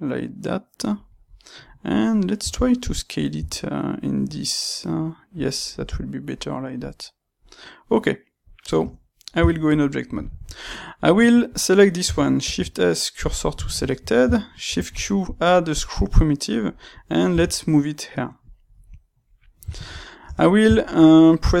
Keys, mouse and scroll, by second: 1.0 click, 1.1-5.4 middle drag, 3.3 s, 5.4 click, 5.5-11.4 middle drag, 5.7-6.3 scroll down 2, 8.7 Tab, 11.4 click, 12.4 shift+s, 13.6-20.2 ctrl+middle drag, 14.5 shift+q, 17.2 g, 18.5 click, 20.2 Tab, 20.4-21.6 shift+middle drag.